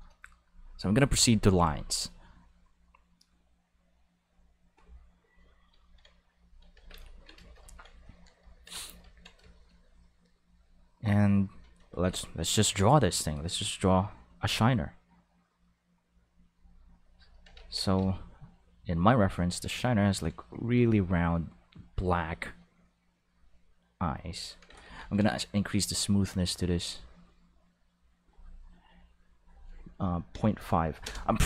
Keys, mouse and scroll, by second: 0.4 click, 1.1 click, 1.5 click, 1.9 click, 6.4 click, 6.7 ctrl+s, 10.4-11.8 drag, 11.9 ctrl+z, 12.5-14.2 drag, 16.5 click, 17.5 ctrl+z, 17.9 ctrl+z, 18.8-20.7 drag, 21.6-24.0 drag, 24.6 ctrl+z, 24.9 ctrl+z, 28.2 click, 29.4 click, 30.3 ., 30.7 5, 31.0 Return.